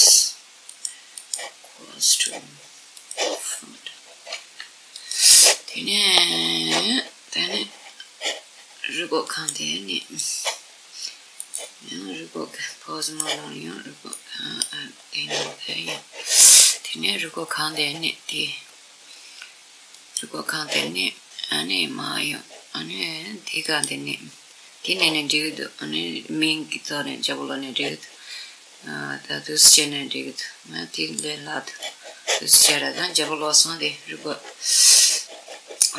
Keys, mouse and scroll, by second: 2.7 click, 3.4-5.4 middle drag, 4.1 r, 4.8 click, 8.9-12.9 drag, 13.8-16.7 middle drag, 15.5-16.4 scroll up 1, 19.5 click, 20.9-24.0 middle drag, 23.3 click.